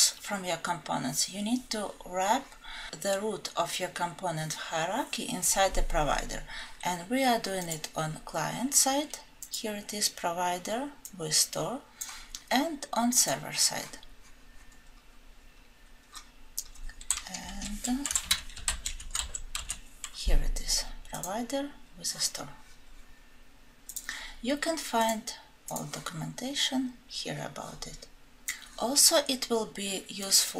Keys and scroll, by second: 17.5 ctrl+f.